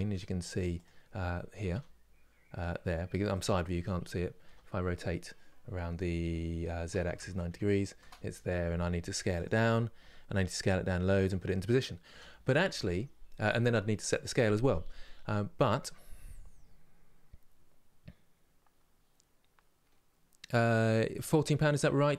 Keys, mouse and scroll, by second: 9.7 s, 11.8 Delete, 12.6 click.